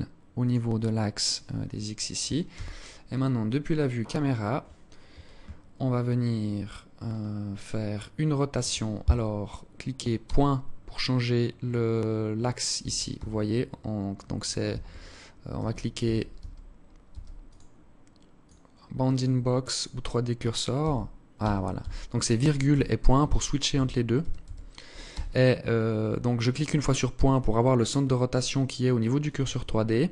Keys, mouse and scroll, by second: 1.1 scroll down 7, 2.0 KP_0, 3.2 right click, 9.8 ., 12.4 ., 12.7 ,, 14.3-16.6 typing, 17.0 click, 18.7 click, 20.4-24.7 typing.